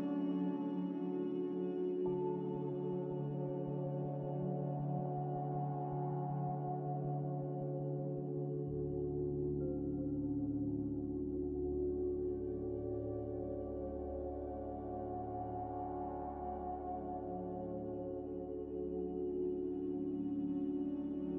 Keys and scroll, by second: 1.2-2.7 typing, 5.3-7.1 typing, 9.0 F9, 10.6 a, 17.7 n.